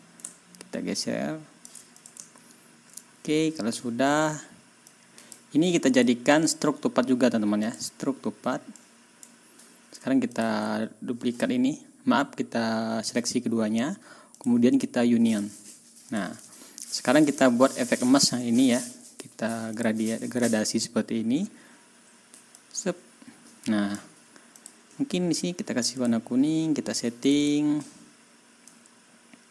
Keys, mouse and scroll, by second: 0.0 click, 2.5-3.0 ctrl+shift+scroll down 3, 4.9 click, 6.0 click, 7.7 click, 8.8 click, 10.3 shift+click, 14.4 click, 15.3 click, 16.1 click, 16.5 ctrl+scroll down 2, 17.2 ctrl+click, 17.6 ctrl+scroll up 2, 19.8 click, 20.4-20.7 ctrl+scroll down 2, 22.6-24.1 drag, 24.6 click, 26.0 click, 27.3 click, 28.7-29.5 drag.